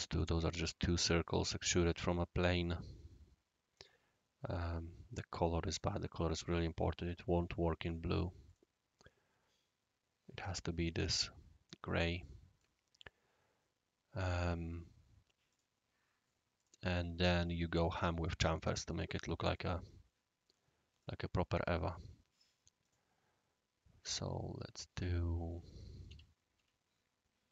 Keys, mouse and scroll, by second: 2.6 click, 3.7 click, 4.5 right click, 5.7 click, 8.4 click, 12.2 click, 12.6-14.3 right drag, 15.5 click, 16.5 click, 17.3-18.2 right drag, 21.0 click, 22.8 click, 24.0 click, 25.5 click, 26.1 End, 26.5 Down.